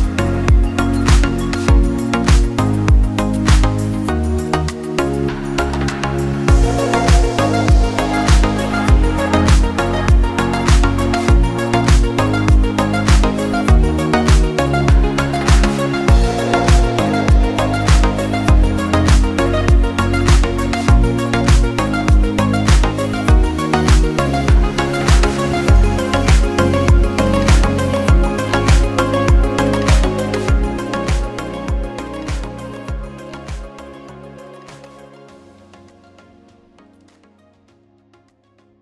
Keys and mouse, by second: 1.6 middle click, 2.5-8.3 drag, 4.6 BackSpace, 8.3 middle click, 8.4-10.9 drag, 10.9-38.8 shift+middle drag.